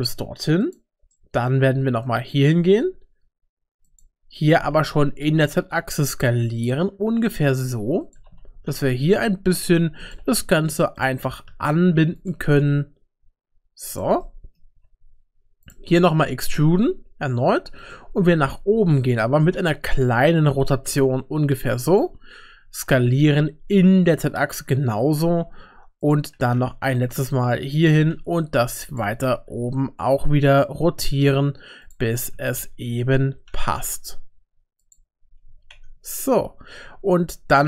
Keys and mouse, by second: 1.1 middle click, 1.7 e, 4.5 s, 8.2 g, 10.1 g, 11.5 2, 12.2 click, 12.4 g, 14.2 middle click, 14.8 3, 16.0 middle click, 16.6 e, 18.1 g, 19.3 r, 22.9 s, 26.3 e, 27.9 g, 29.0 r, 35.5 r.